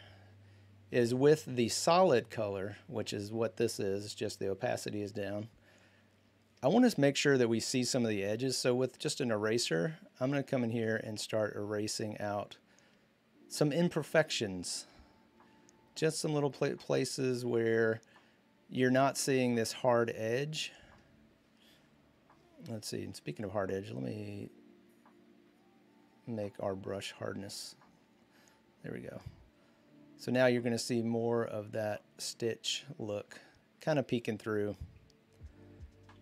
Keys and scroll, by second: 8.0 e.